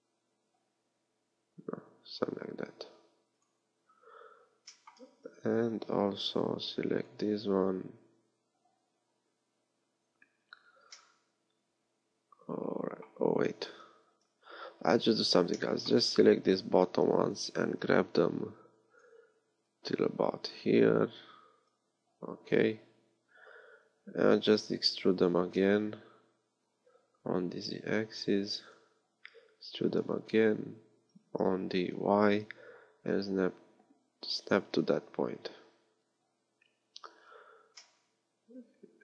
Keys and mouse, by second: 5.1 a, 6.3 b, 14.1 KP_3, 16.0 a, 17.1 b, 24.5 e, 30.0 e, 34.9-39.0 middle drag.